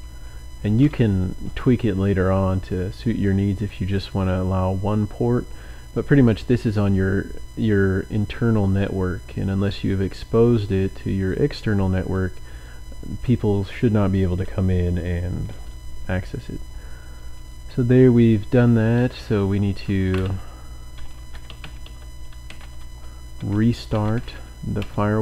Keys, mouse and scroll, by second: 0.0-0.9 typing, 3.3 click, 11.3-12.4 drag, 12.7 click, 19.1-25.0 typing.